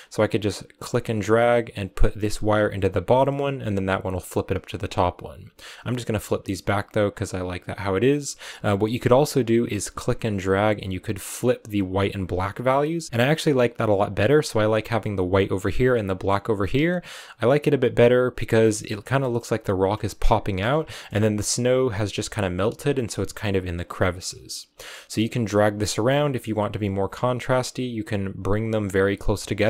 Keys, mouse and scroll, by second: 0.7 click, 5.7 click, 10.0-12.2 drag, 12.2 scroll down 2, 13.1 middle click, 13.8 click, 15.7-18.4 drag, 18.4 shift+middle click, 18.8 scroll up 2, 19.1-21.0 shift+middle drag, 21.0 scroll up 2, 24.2-29.3 drag, 29.3 shift+middle click, 29.6 scroll up 4.